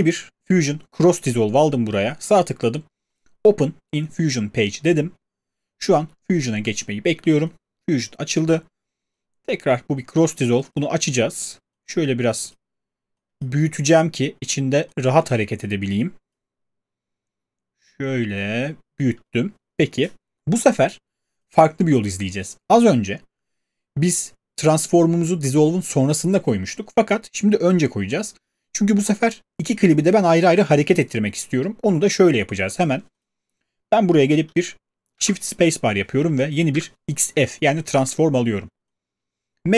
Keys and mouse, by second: 35.1 space, 36.7 Return.